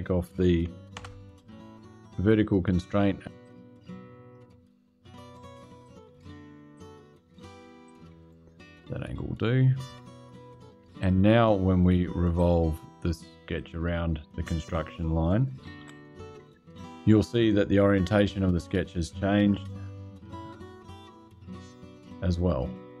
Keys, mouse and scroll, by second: 0.7 Delete, 2.2 click, 3.1 click, 5.5 click, 6.5 click, 7.6 click, 9.6 click, 10.7 click, 12.1 click, 13.3 click, 15.3-16.1 typing, 17.9-23.0 drag.